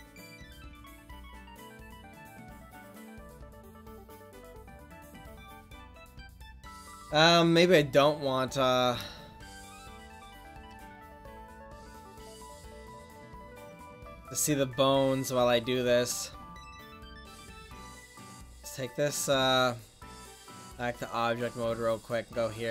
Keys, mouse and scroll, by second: 2.1-3.2 drag, 3.2 ctrl+z, 8.1-9.3 middle drag, 12.9-13.8 middle drag, 16.0 Tab, 20.4-22.7 drag.